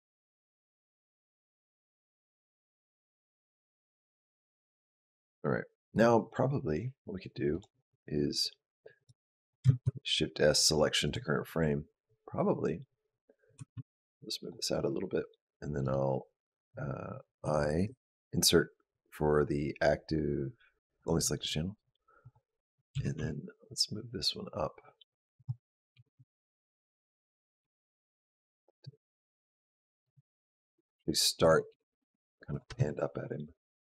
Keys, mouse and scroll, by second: 7.4 click, 8.8 click, 9.2 click, 9.6 shift+s, 13.4 g, 15.6 right click, 17.6 i, 22.0 click, 22.7 g, 27.4 r, 28.5 space, 29.9 space, 30.7 click, 31.5 g, 32.5 space.